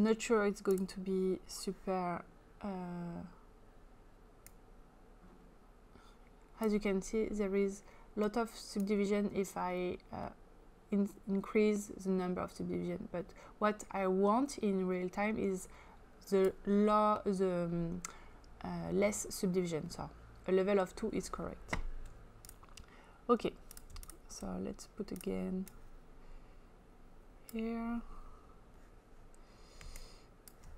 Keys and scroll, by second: 29.9 space.